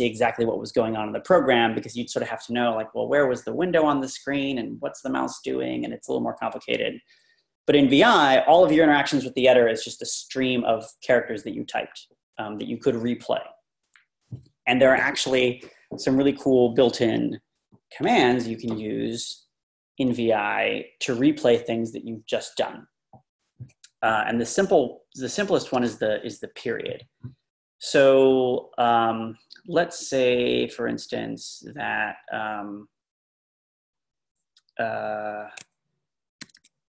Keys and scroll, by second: 36.4-36.9 typing.